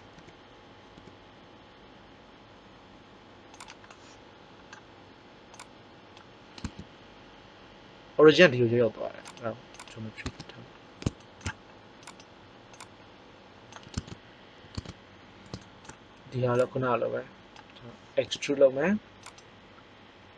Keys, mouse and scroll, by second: 0.1 f, 0.9 g, 6.6 Tab, 9.2 click, 10.2 Tab, 10.8 middle click, 12.7 click, 16.4 click, 18.2 e.